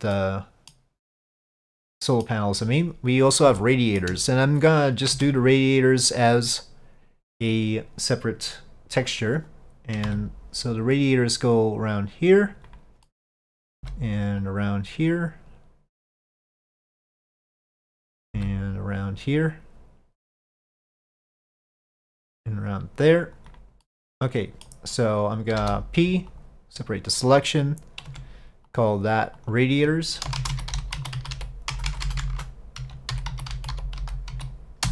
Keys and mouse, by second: 0.2-0.8 middle drag, 1.2-1.5 middle drag, 1.8-2.3 middle drag, 3.7-4.1 shift+middle drag, 5.2 Tab, 9.4 click, 13.1 middle click, 17.3-18.3 middle drag, 20.9 middle click, 23.9 middle click, 28.2 Tab, 28.8 click, 29.5-34.9 drag, 32.0 BackSpace.